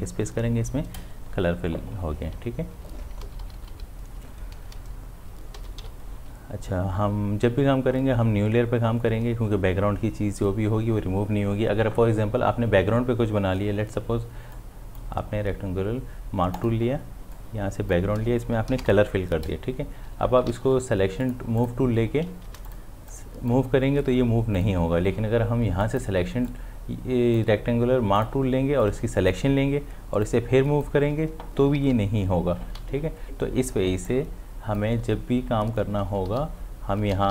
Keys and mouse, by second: 3.2 ctrl+z, 4.6 ctrl+shift+z, 5.6 ctrl+d, 5.8 v, 14.6-20.5 drag, 20.5 v, 21.2 click, 22.5 ctrl+d, 22.7-31.8 drag, 31.8 ctrl+z, 32.7 m, 34.1-36.1 drag, 36.1 ctrl+d, 36.3 v.